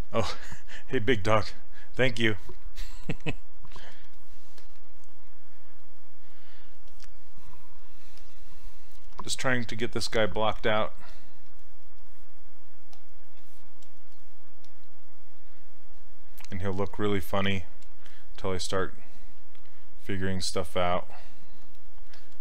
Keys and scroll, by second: 9.2 s.